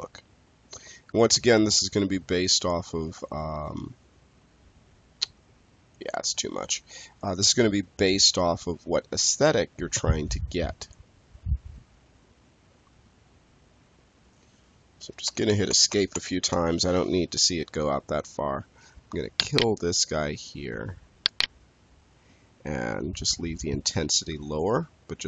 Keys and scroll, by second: 14.9 Escape.